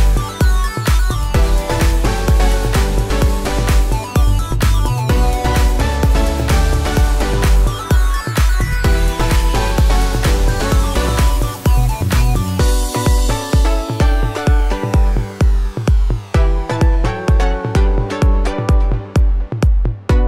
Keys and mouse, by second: 0.3 ctrl+click, 0.6 ctrl+click, 0.6-13.9 ctrl+right drag, 3.5 alt+z, 3.6 e, 4.5 alt+s, 5.4 alt+z, 6.3 g, 7.7 g, 10.9 f, 11.5 f, 11.6 click, 11.6 middle click, 13.5 v, 13.9-20.2 middle drag, 14.2 v, 14.7 v, 14.8 3, 15.2 click, 15.9 g, 17.2 r, 18.5 2, 18.9 shift+click, 19.6 shift+f.